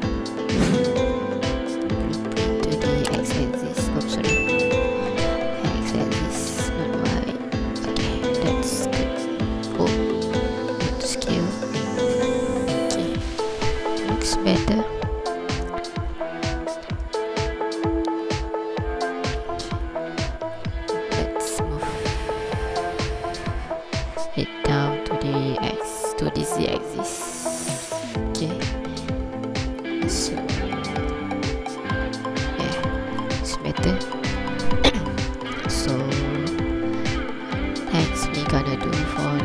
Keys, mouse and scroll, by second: 1.7 g, 2.4 y, 3.9 click, 4.8 g, 5.1 x, 7.8 click, 8.2 scroll down 1, 8.8 scroll down 1, 9.1 ctrl+click, 10.5 ctrl+z, 11.2 scroll up 2, 12.3 scroll down 1, 12.3 n, 12.6-13.0 scroll down 1, 13.2 ctrl+click, 15.5 alt+a, 15.9 scroll down 1, 17.5 shift+click, 19.8 right click, 20.3 ctrl+click, 20.7 click, 27.9 KP_3, 29.0 click, 30.8 alt+a, 31.4 shift+click, 33.0 ctrl+click, 33.8-34.4 scroll down 1, 34.4 KP_7, 34.7 scroll up 2, 35.3 ctrl+click, 35.7 scroll up 3, 36.2-36.8 scroll down 1, 36.8 scroll down 1, 37.3 scroll down 1, 37.8 scroll up 1, 38.1 scroll down 1, 38.6 scroll up 1.